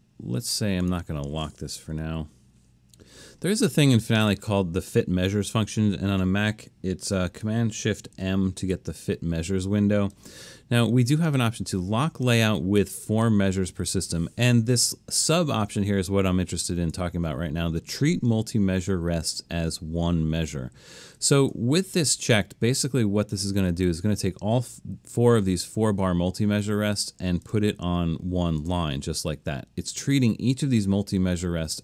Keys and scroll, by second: 1.8 u, 8.2 shift+super+m.